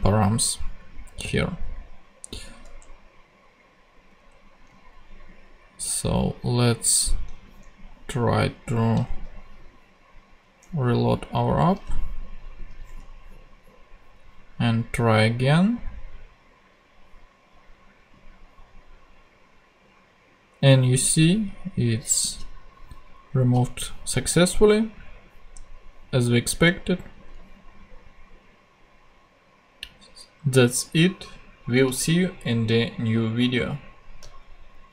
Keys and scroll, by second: 2.6 super+Tab, 4.0 super+Tab, 5.8 super+Tab, 9.0 super+Tab, 11.8 super+Tab.